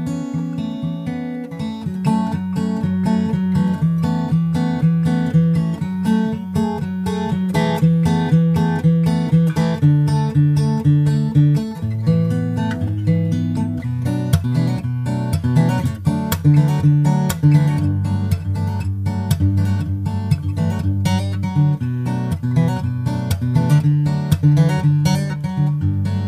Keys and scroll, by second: 1.0 super+Tab, 1.4 super+Tab, 1.7 super+Tab, 1.8 super+Tab, 3.8 super+Right, 8.7 super+Right, 11.2 super+Left, 11.4 shift+super+Right, 13.5 super+Right, 15.1 super+z, 15.8 shift+super+Right, 16.0 super+d, 17.6 super+Right, 19.0 super+space, 19.0 super+s.